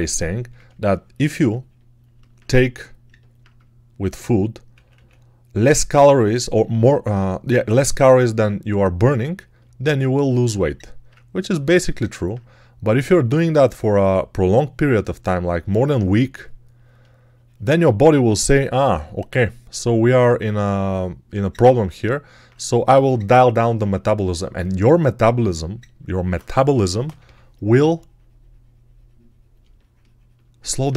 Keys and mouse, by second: 4.6 ctrl+z, 7.3 click, 7.7-9.5 ctrl+drag, 10.6 alt+click, 11.0 ctrl+click, 11.8 alt+click, 13.3-15.2 drag, 26.5 3, 26.9 ], 27.1 ].